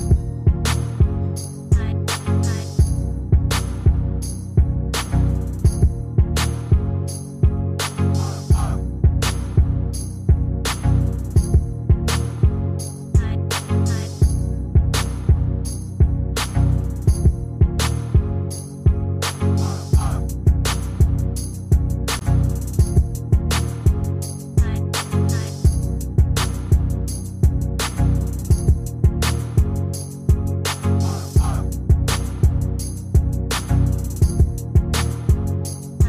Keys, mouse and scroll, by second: 2.5 ctrl+d, 33.4-33.9 ctrl+scroll down 1, 34.8-35.3 ctrl+scroll down 1.